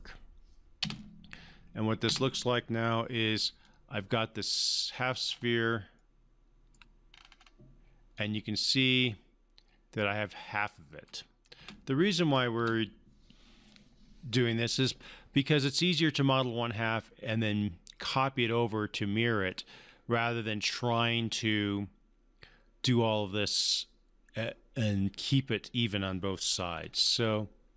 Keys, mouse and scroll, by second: 0.8 space, 3.6-5.2 alt+drag, 5.3 scroll up 1, 5.9-6.9 alt+middle click, 7.1-7.4 scroll up 1, 8.1-11.3 alt+drag, 11.6 space, 26.7 alt+scroll up 1.